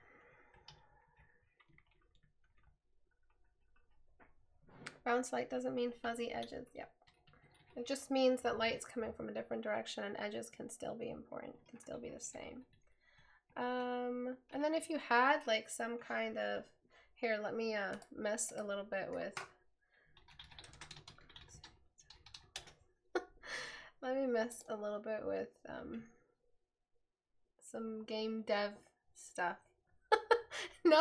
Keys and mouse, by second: 6.3 right click.